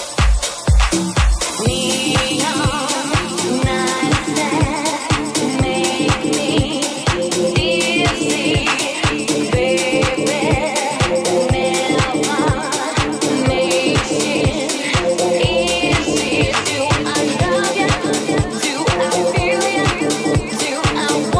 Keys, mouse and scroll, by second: 1.2 right click, 1.3-2.4 middle drag, 2.4 Tab, 2.6 ctrl+a, 3.1 Tab, 3.7 alt+e, 3.9-6.7 alt+middle drag, 6.9-13.6 middle drag, 13.6-15.4 ctrl+drag, 15.4-21.3 middle drag, 18.8 ctrl+r, 20.9 ctrl+r.